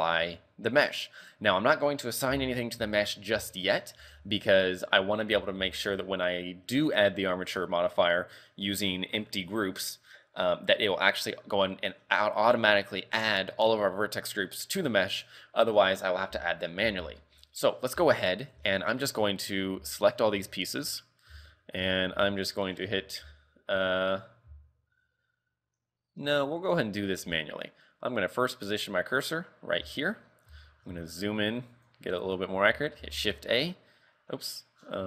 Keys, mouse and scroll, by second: 0.0 shift+middle click, 2.3 z, 2.5 scroll down 4, 3.1 shift+middle click, 3.4 z, 4.0 r, 5.0 scroll down 3, 5.4 z, 5.8 shift+middle click, 16.6-17.3 scroll up 2, 16.9 z, 17.3 shift+middle click, 17.7 scroll up 2, 18.0 a, 18.6 b, 20.1 shift+right click, 20.7 shift+middle click, 21.4 shift+middle click, 22.5 shift+middle click, 27.3 a, 29.2 click, 30.0 shift+middle click, 30.3-31.2 scroll up 9, 30.7 shift+middle click, 31.8 click, 32.3 click, 33.1 shift+a, 34.5-35.0 scroll down 9.